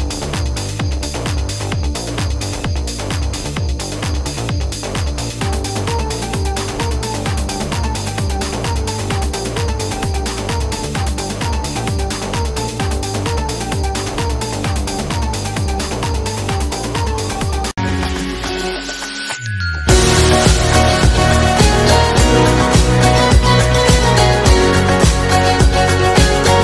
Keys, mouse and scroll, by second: 7.6-13.7 drag, 14.8 click, 16.3 click.